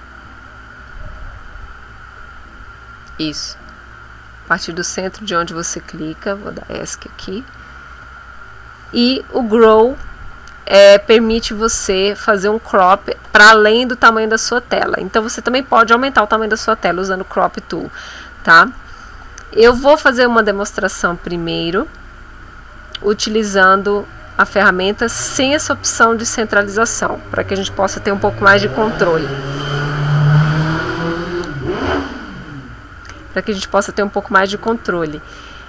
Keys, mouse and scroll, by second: 6.3 Escape, 24.3 click.